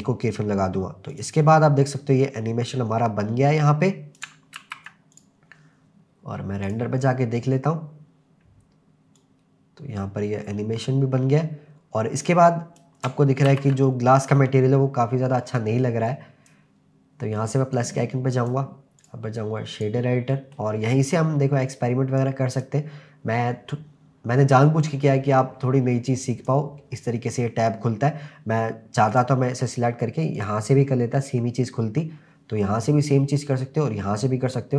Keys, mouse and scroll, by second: 1.1 click, 1.9-4.2 drag, 4.6 ctrl+s, 5.1 click, 7.0 click, 9.2-12.8 drag, 9.2-9.7 scroll up 1, 13.5 ctrl+s, 13.9-16.1 scroll up 1, 16.1-18.5 drag, 19.0-19.8 drag, 20.3 middle click, 20.8-22.1 scroll up 4, 22.1 scroll up 1, 22.2 click, 26.1 click, 29.1 click, 30.4 click.